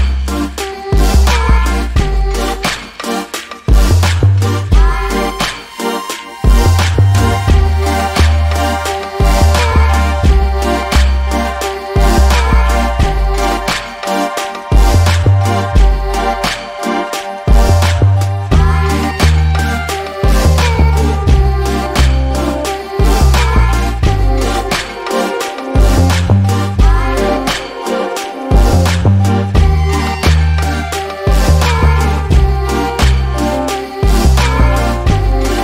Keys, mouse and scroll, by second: 0.8 alt+middle click, 1.5 click, 6.3 alt+middle click, 7.1 click, 9.2 alt+middle click, 9.5 alt+click, 17.1 alt+middle click, 17.9 click, 20.9 alt+middle click, 21.3 alt+click, 29.4 alt+middle click, 29.9 alt+click, 35.5 scroll down 1.